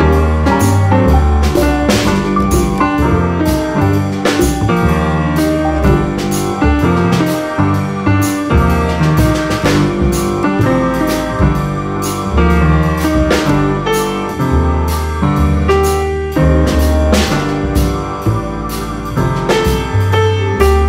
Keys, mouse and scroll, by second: 0.0 click, 0.5 scroll down 1, 0.7-1.1 scroll up 1, 1.4 click, 2.2 click, 3.1 click, 3.9 click, 7.9 click, 8.1 scroll down 1, 8.4-8.7 scroll up 1, 9.0-10.6 drag, 11.0 click, 11.8-12.2 scroll up 1, 12.2-12.8 scroll down 5, 13.2-14.3 drag, 15.0 click, 15.3 scroll down 2, 15.5-15.9 scroll up 1, 16.2 click, 16.8 click, 17.6 drag, 18.3 drag, 19.4 click, 19.6 scroll down 2, 19.9-20.3 scroll up 1, 20.3 click.